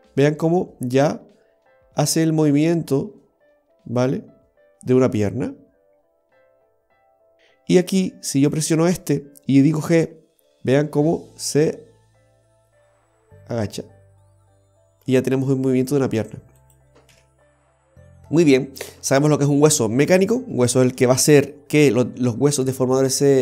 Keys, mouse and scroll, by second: 7.4 ctrl+z, 8.5 right click, 9.9 g, 17.2 ctrl+z, 19.3 right click, 21.3 r, 21.4 g.